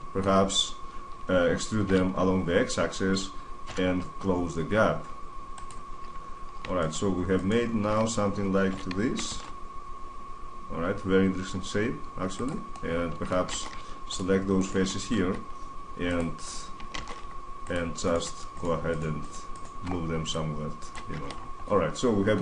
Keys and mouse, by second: 1.6 e, 5.4-6.5 drag, 6.5 middle click, 7.4-8.5 drag, 8.5 s, 12.2-12.7 drag, 12.7-14.3 middle drag, 13.3 ctrl+Tab, 16.4 click, 16.7 ctrl+Tab, 19.9 click, 20.5 middle click, 20.9 Tab, 21.1-22.1 middle drag.